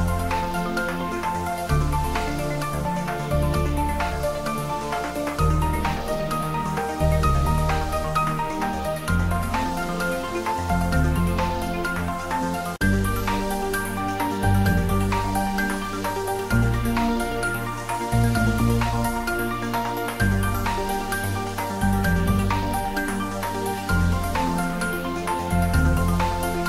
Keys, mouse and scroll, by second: 0.7 click, 2.2-3.2 typing, 4.2 click, 5.0 g, 6.2 click, 6.5 r, 7.7 click, 11.2 shift+d, 12.3 x, 14.8 click, 15.3 r, 17.1 click, 17.4 ctrl+s, 18.5 shift+middle click, 19.5 click, 20.5-23.4 typing, 21.9 click, 23.9 Down, 24.3 click, 24.8 ctrl+s, 25.1-26.6 middle drag.